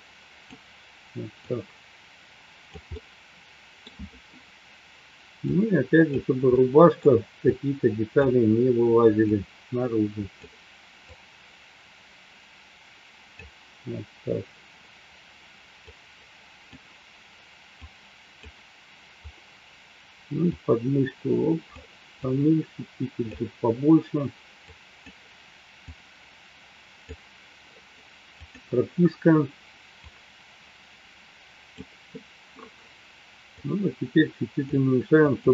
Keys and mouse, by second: 2.0 click, 3.0 middle click, 5.4 click, 6.5 middle click, 7.4-8.6 drag, 9.2-10.4 drag, 11.0-13.4 drag, 15.9 click, 17.7 click, 20.4-21.8 drag, 22.1-23.2 drag, 24.6 click, 25.8-27.0 drag, 30.3-32.1 drag, 33.6-35.0 drag.